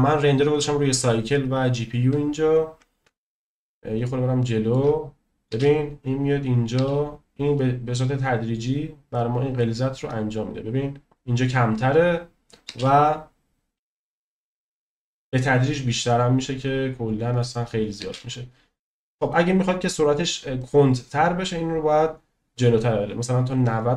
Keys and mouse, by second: 0.0 click, 4.0-4.7 shift+middle drag, 5.5 space, 6.7 space, 9.6-11.0 drag, 12.7 space, 18.2 space, 18.8 click, 20.6 click.